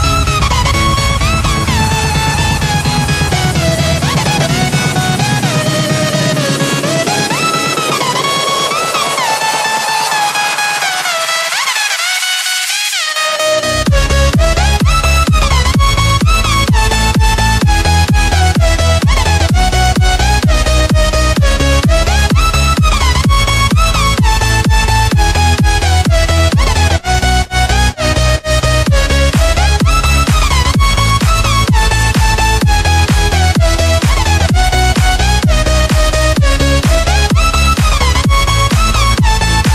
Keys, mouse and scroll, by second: 0.3 click, 3.4 Tab, 3.6-4.0 scroll down 5, 5.5 click, 7.9 KP_7, 8.8-9.3 scroll up 4, 9.8-10.6 drag, 10.6-11.8 scroll up 3, 11.8-17.6 drag, 18.4-21.4 drag, 21.4 click, 23.5-24.8 drag, 25.5 click, 26.7 click, 27.8-28.8 scroll down 4, 28.8-29.6 scroll down 2, 29.6 click, 30.6-31.7 scroll up 5, 31.7 click, 35.3-36.0 scroll down 6, 36.6 click, 39.5 click.